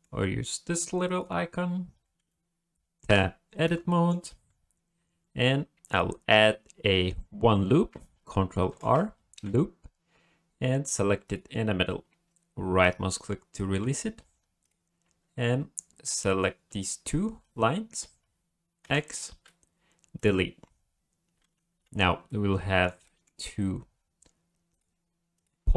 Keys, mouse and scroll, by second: 1.0 click, 1.9-2.6 scroll up 2, 3.1 Tab, 3.9 shift+middle click, 8.7 ctrl+r, 14.6 click, 16.0 shift+click, 18.8 x, 21.9 1, 22.3 middle click, 23.0 shift+middle click, 24.7 click, 25.3 click.